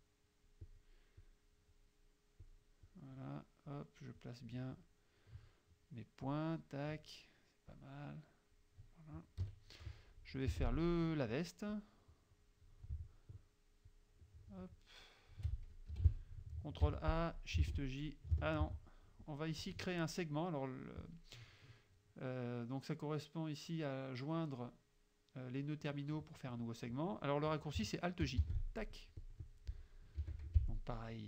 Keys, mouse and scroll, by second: 1.3 click, 2.5 click, 2.9-3.9 drag, 4.2 click, 6.3 click, 7.8-8.8 drag, 9.5 KP_Subtract, 10.6 F6, 11.8-12.9 drag, 13.9-15.6 shift+drag, 16.0 F2, 16.9 ctrl+a, 17.7 shift+j, 18.7 ctrl+z, 19.6 click, 28.5 alt+j, 29.2 click, 30.3 F7, 30.6 F6.